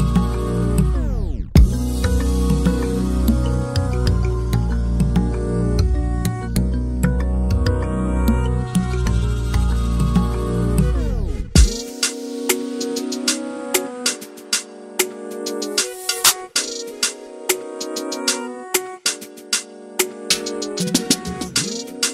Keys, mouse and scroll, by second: 0.0 shift+middle click, 0.1 middle click, 0.9 scroll up 1, 1.0 middle click, 1.4 scroll down 1, 1.5-1.8 scroll up 1, 1.8 click, 2.1 /, 2.3 shift+middle click, 2.6 scroll up 2, 2.7 middle click, 2.9 scroll down 2, 3.0 middle click, 3.7 click, 3.8 shift+middle click, 4.2 click, 5.5 click, 6.5 click, 7.5 ctrl+z, 7.9 click, 8.6 click, 8.8-9.2 scroll down 4, 8.9 alt+a, 9.2-9.5 scroll up 3, 9.6 click, 10.1 scroll down 1, 10.2 alt+a, 10.2 scroll up 3, 10.4-11.9 scroll down 7, 10.6 middle click, 10.8 shift+middle click, 11.0 middle click, 11.6 /, 11.9 alt+a, 12.1 shift+middle click, 12.2 scroll up 1, 12.3-12.7 middle drag, 12.7 scroll down 1, 12.9-13.3 middle drag, 13.3 drag, 13.7 KP_1, 13.9-14.5 scroll up 2, 14.0 shift+middle click, 14.5 Tab, 14.7 alt+z, 15.1 alt+z, 15.3 click, 16.7 click, 17.1 2, 17.2 click, 17.6 middle click, 17.7 scroll down 2, 18.3 ctrl+b, 21.2 click, 21.9 s.